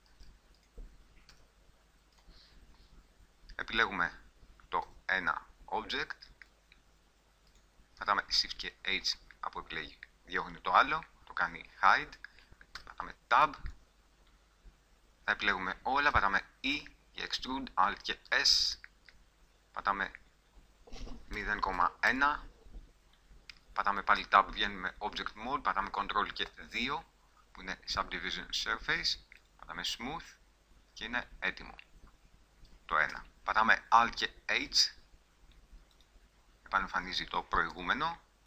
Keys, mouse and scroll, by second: 0.3 ctrl+z, 1.5 g, 5.0 g, 6.7-7.7 drag, 7.7 middle click, 8.8 shift+h, 12.9 Tab, 13.9 click, 14.6 middle click, 15.2 a, 16.3 e, 18.0 alt+s, 24.3 Tab, 26.7 ctrl+2, 30.5-31.8 middle drag, 32.0 middle click, 32.2 middle click, 32.6 middle click, 33.3 a, 34.8 alt+h, 37.9 g.